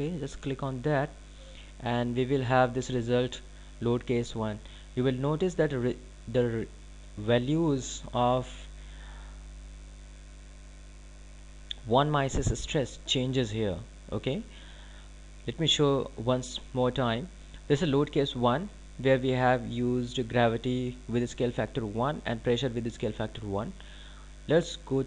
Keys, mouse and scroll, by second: 2.8 click.